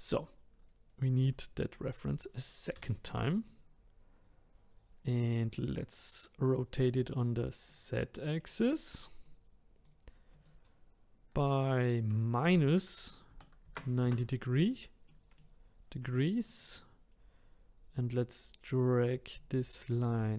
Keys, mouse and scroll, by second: 2.7 shift+d, 7.7-9.2 middle drag, 9.2-13.5 drag, 15.1-16.3 middle drag, 16.3 click, 17.1-19.3 scroll up 1, 19.3 click.